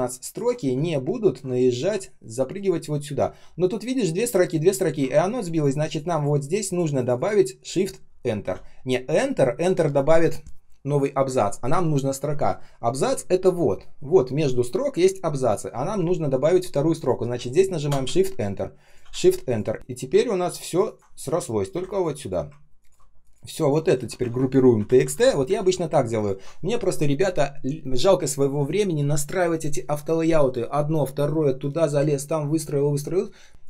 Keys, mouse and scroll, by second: 0.8-1.9 ctrl+scroll up 1, 2.6 ctrl+scroll down 1, 17.8 shift+Return, 19.0 shift+Return, 19.7 Up, 20.6 ctrl+click, 20.7 ctrl+click, 21.6 Delete, 22.7 ctrl+click, 23.1 ctrl+shift+click, 23.5 ctrl+shift+click, 23.9 ctrl+g, 24.2 ctrl+r, 24.4-25.5 typing, 26.1 ctrl+click, 33.5 ctrl+scroll up 1.